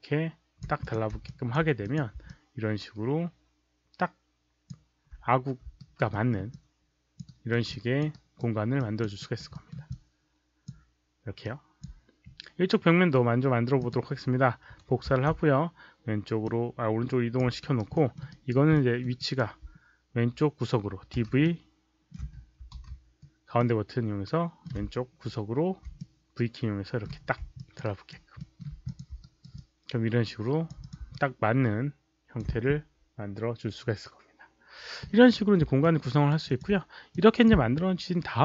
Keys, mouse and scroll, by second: 0.7 click, 1.2 alt+click, 1.7 click, 2.2-4.6 alt+drag, 5.7 alt+right click, 6.0 alt+middle click, 6.4 alt+click, 7.2 alt+right click, 7.6 alt+click, 8.0 alt+right click, 8.7 alt+click, 9.1 alt+right click, 9.4 alt+middle click, 9.8 alt+click, 11.3 alt+click, 13.7 click, 15.0 ctrl+d, 16.3-17.3 drag, 17.6 alt+right click, 17.9 alt+middle click, 18.2 alt+right click, 18.6 alt+middle click, 19.1 alt+right click, 21.3-23.3 typing, 21.3 middle click, 23.5-24.6 middle drag, 25.8 v, 25.9-27.0 middle drag, 27.5 alt+click, 27.7 alt+right click, 28.3 alt+middle click, 28.8 click, 29.1 alt+right click, 29.5-30.6 alt+drag, 30.7 click, 31.1-32.3 alt+drag, 32.3 middle click, 32.3 v, 35.7 alt+click, 36.0 alt+right click, 36.4 alt+click, 37.0 click.